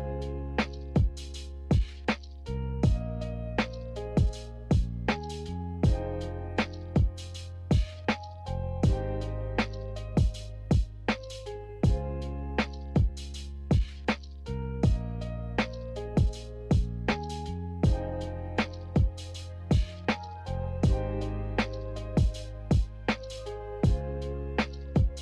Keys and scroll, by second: 0.9 Delete, 2.0 Delete, 2.8 Delete, 14.9 Delete, 16.0 Delete, 19.0 Delete, 22.6-24.0 typing, 25.1 Delete.